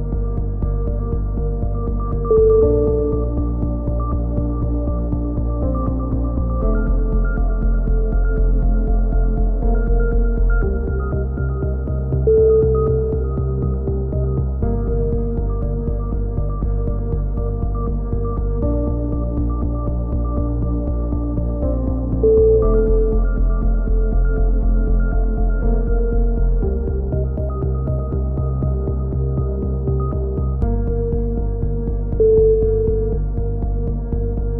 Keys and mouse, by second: 0.1 z, 0.3 click, 2.3 KP_7, 3.1 z, 3.6 click, 6.5 click, 7.4-8.7 right drag, 7.5 click, 9.4 right click, 9.7 f, 9.8 a, 9.9 z, 10.1 z, 10.2 click, 13.9 click, 16.3 right click, 16.4 click, 16.7 ctrl+z, 17.0 click, 17.7 a, 18.0 click, 18.4-19.4 middle drag, 19.4 KP_7, 19.6 z, 19.7 click, 21.8 right click, 22.0 click, 22.5 click, 23.9 click, 24.5 a, 25.0 right click, 25.2 click, 26.0 click, 26.5 ctrl+z, 26.7 click, 27.8-31.9 typing, 30.7 click, 31.0 click, 31.9-33.5 drag, 32.4 right click, 33.0 a, 33.5 middle click, 34.1-34.5 drag.